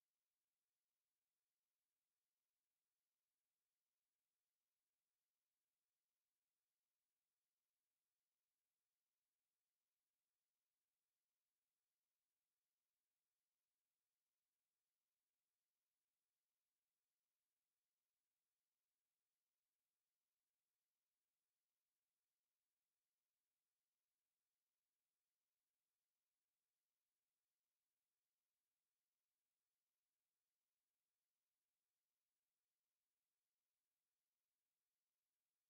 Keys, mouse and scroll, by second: 3.0 click, 3.7 click, 5.4 click, 8.4 KP_1, 8.8 KP_Enter, 11.0-19.7 drag, 20.1 click, 21.4 click, 22.3-22.6 scroll down 1, 23.2-25.6 drag, 26.8 click, 28.4 click, 29.3-32.4 drag, 34.1 click, 35.1 click.